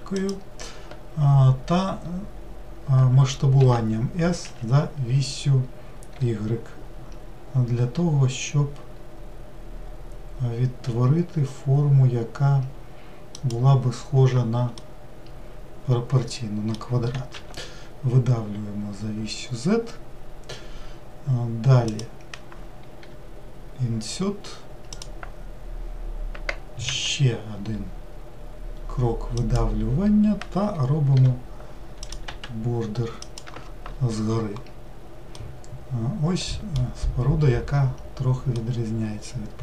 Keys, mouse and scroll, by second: 14.9-17.5 middle drag, 17.5 e, 35.5-38.5 middle drag, 38.7-39.6 shift+middle drag.